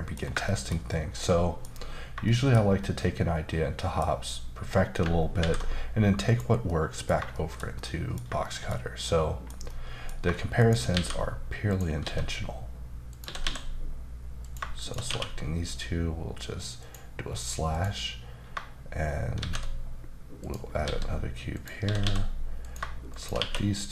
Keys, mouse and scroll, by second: 0.2 scroll down 1, 0.4 shift+middle click, 2.2 shift+middle click, 5.4 alt+v, 6.2 click, 6.6 middle click, 7.3 shift+middle click, 8.4 shift+middle click, 9.6 middle click, 10.6 shift+right click, 10.9 shift+a, 11.7 click, 12.0 s, 13.1 click, 13.2 typing, 14.4 click, 14.8 shift+click, 15.1 q, 16.8 click, 17.3-17.7 scroll up 2, 17.7 click, 19.3 shift+a, 20.4 click, 20.8-22.0 typing, 21.5 click, 22.6 click, 23.1 shift+click, 23.3 q.